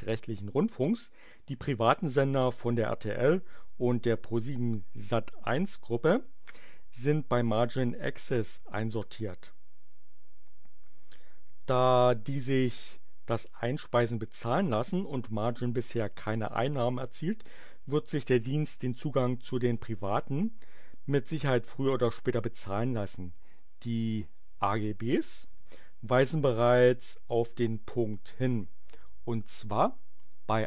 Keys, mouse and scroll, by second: 25.5 click, 30.2 click.